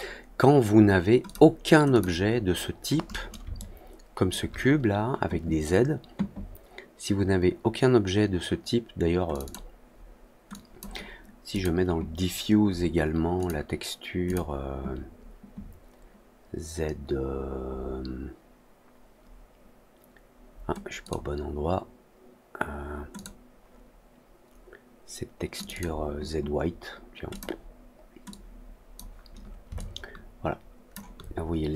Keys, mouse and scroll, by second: 1.2 alt+click, 1.8 click, 3.5 alt+middle click, 9.2 click, 9.4 click, 10.4 drag, 11.4 click, 13.3 click, 14.2 click, 20.9 click, 23.1 click, 25.5 click, 25.6 click, 27.2 click, 28.2 click, 29.7-30.8 alt+drag.